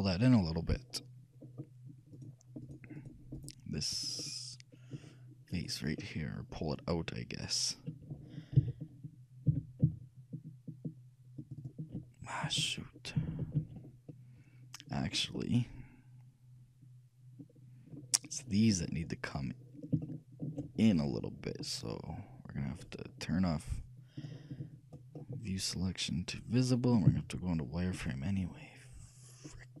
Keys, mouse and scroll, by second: 0.0-4.3 drag, 1.6-6.1 middle drag, 1.8-4.8 right drag, 4.8 click, 5.7 right click, 6.3 click, 6.3-8.0 middle drag, 7.3 right click, 8.8 g, 11.7-13.7 drag, 13.0-17.3 ctrl+middle drag, 13.5 ctrl+z, 19.3-22.0 middle drag, 24.3-26.1 drag, 25.3-27.1 middle drag, 27.2 z.